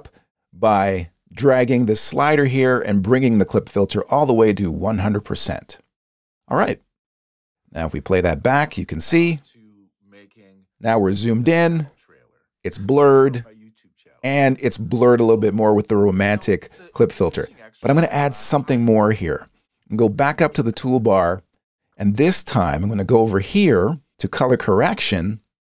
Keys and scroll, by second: 8.9 space, 19.6 space.